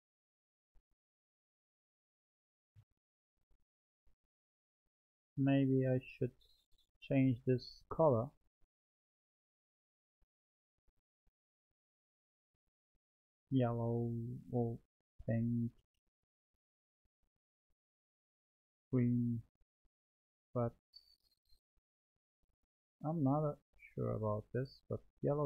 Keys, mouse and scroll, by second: 3.9-6.2 middle drag, 6.2 click, 9.1-11.8 drag, 12.7 click.